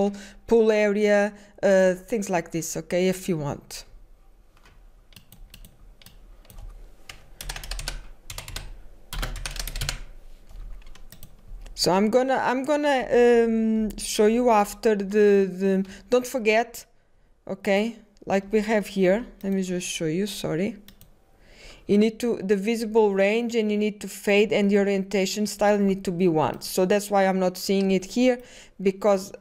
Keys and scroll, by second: 1.6-4.8 typing, 8.9-9.7 typing, 12.8-13.5 typing.